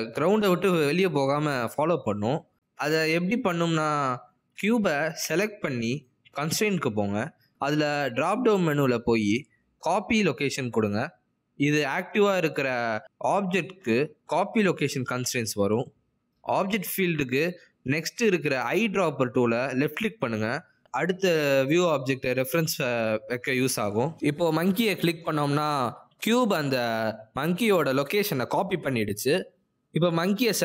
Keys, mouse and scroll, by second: 7.0 click, 9.2 click, 22.7 click.